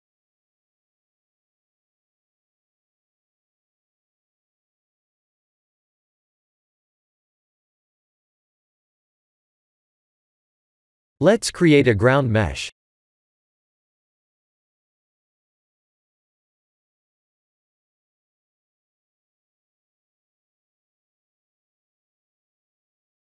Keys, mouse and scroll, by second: 0.1 Tab, 0.5 middle click, 0.8 Tab, 1.2 middle click, 8.4 KP_1, 9.7 middle click, 10.7 click, 11.2 shift+a, 12.3 click, 12.6 click, 13.0 x, 14.6 click, 15.2 shift+middle click, 15.7 middle click, 17.6 click, 18.1 x, 18.6 middle click, 20.0 ctrl+s, 21.0 shift+a.